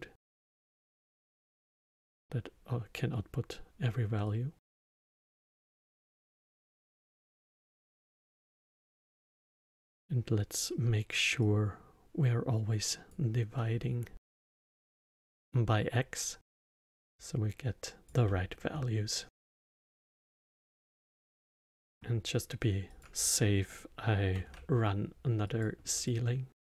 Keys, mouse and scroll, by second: 1.2 drag, 4.3 drag, 6.3 drag, 11.4 click, 13.5-17.1 middle drag, 17.1 click, 18.2-20.7 middle drag, 20.7 click, 21.5 x, 21.8 middle click, 22.9 click, 24.3 shift+d.